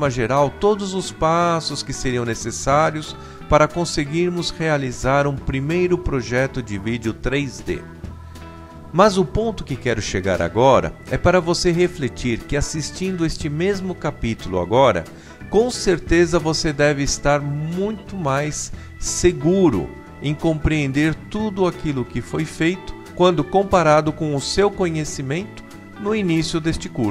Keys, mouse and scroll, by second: 0.6 Delete, 1.5 click, 2.5 Tab, 2.8-4.3 typing, 5.2 Tab, 8.5 click, 11.4 click, 14.2 r, 16.9 click, 17.4 click, 20.5 click, 21.1-22.2 middle drag, 23.7 KP_0, 25.9 KP_3, 26.0 KP_9.